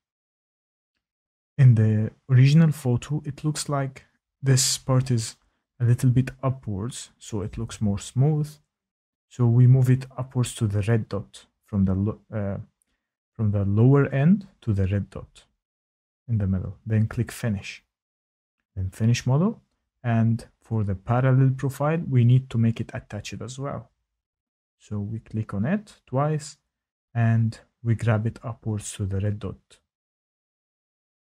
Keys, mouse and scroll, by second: 5.2-5.6 typing, 8.5 click, 11.5 click, 15.1 shift+middle click, 22.3 click, 22.5 click, 23.3 click, 23.4 click, 24.2 Tab, 24.6 click, 26.9 click, 28.9 click, 30.1 click.